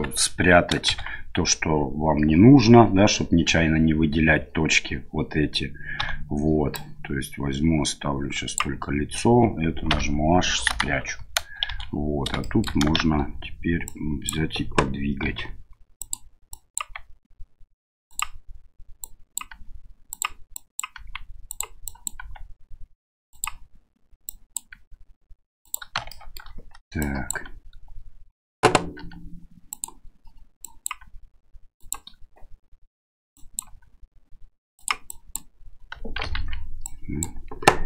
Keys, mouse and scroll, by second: 0.9 shift+z, 6.0 a, 6.8-8.6 drag, 9.9 h, 10.7 KP_1, 11.7 shift+z, 12.4 shift+middle click, 13.0 shift+z, 13.9 click, 15.2 g, 16.5-18.3 drag, 16.8 g, 19.0 click, 19.5 g, 20.6 click, 20.9 g, 21.9 click, 22.2 g, 24.3 click, 24.7 g, 26.1 shift+middle click, 27.0 click, 29.0 g, 30.7 click, 31.0 g, 33.3 click, 33.7 g, 35.1 click, 36.3 ctrl+z, 36.9 click.